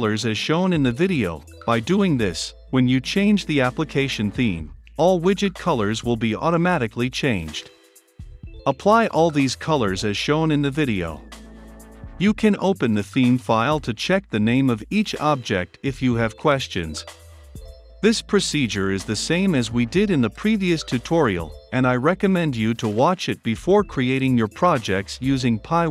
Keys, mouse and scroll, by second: 0.0 click, 2.6-5.1 drag, 6.3-7.3 drag, 7.7 ctrl+v, 8.5-11.1 drag, 11.2 ctrl+c, 11.4 click, 11.6 ctrl+v, 11.7 click, 12.0-13.8 typing, 12.1 Return, 12.9 Return, 13.3 Return, 13.7 click, 13.9 click, 14.3 ctrl+c, 14.5 click, 14.5 ctrl+v, 15.3 ctrl+c, 15.6 ctrl+v, 15.8 ctrl+z, 16.3 ctrl+c, 16.5 click, 16.7 ctrl+v, 17.4 ctrl+c, 17.5 Right, 17.8 Left, 17.9 Return, 18.2 ctrl+space, 18.6 Return, 18.8 Left, 18.8 space, 18.8 Right, 18.9 space, 19.1 ctrl+v, 19.5 click, 20.4 ctrl+c, 20.8 ctrl+v, 21.5 ctrl+c, 21.8 Right, 21.9 Return, 22.0 ctrl+space, 22.4 Return, 23.0 space, 23.6 Return, 25.8 click.